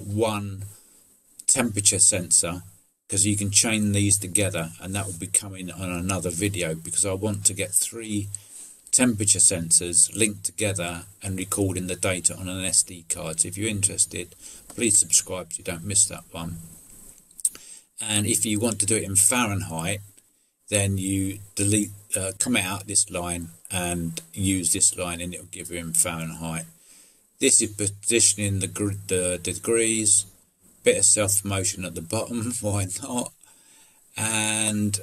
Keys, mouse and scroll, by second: 16.5 middle click, 25.9 middle click, 29.5 middle click, 29.7 middle click, 30.1 middle click, 32.9 middle click, 33.5 middle click.